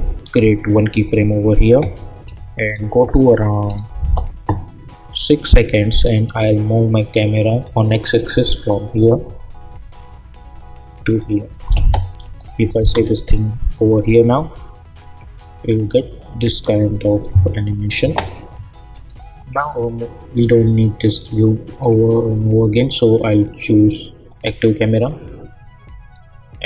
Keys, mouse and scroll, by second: 2.2 =, 5.3 click, 7.6-12.8 drag, 12.8 space, 18.0 space, 18.9 click, 21.6 click, 24.2 click.